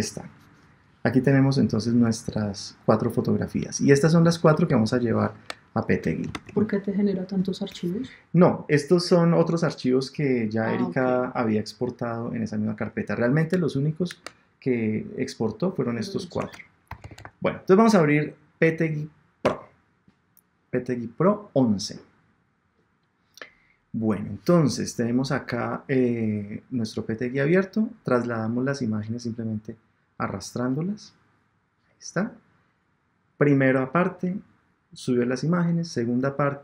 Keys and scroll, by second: 2.3 Down, 3.8 Down, 4.7 shift+Down, 19.4 Return.